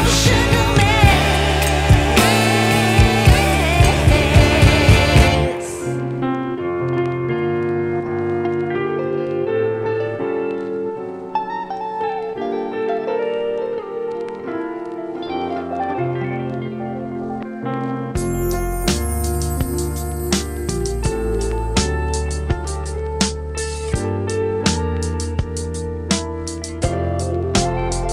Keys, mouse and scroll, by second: 0.9-2.5 right drag, 3.1 click, 3.9 right click, 4.3 scroll down 1, 4.4 scroll up 1, 4.6 right click, 5.8 ctrl+shift+click, 7.1-8.4 scroll up 1, 8.4 click, 10.0 ctrl+shift+click, 11.1 right click, 11.7 click, 11.9 ctrl+shift+click, 12.8 right click, 13.9 click, 15.0 right click, 15.9 ctrl+shift+click, 18.7 right click, 19.5 scroll up 1, 19.7-24.9 right drag, 25.0 scroll down 1, 25.2 scroll up 1, 25.4 right click, 25.8 scroll down 1, 25.9 scroll up 1, 26.1-28.1 right drag.